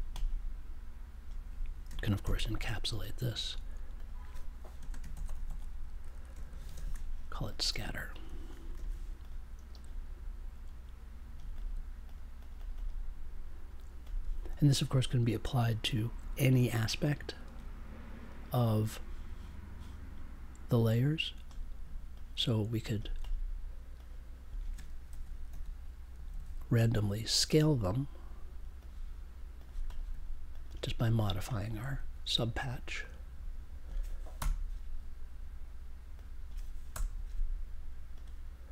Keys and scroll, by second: 2.2 shift+super+e, 4.7 space, 5.1 shift+s, 5.4 shift+a, 8.7 super+j, 25.0 shift+s, 34.3 BackSpace, 34.9 BackSpace, 36.9 BackSpace.